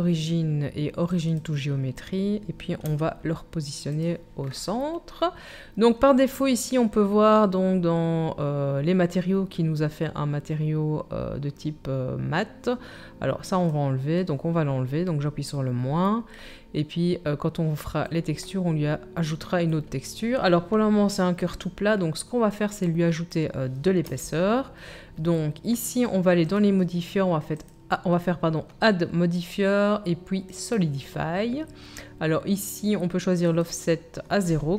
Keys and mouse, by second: 2.8 g, 4.0-13.4 drag, 13.4-26.6 middle drag, 24.0 KP_1, 26.6-27.7 drag, 27.7-34.7 middle drag.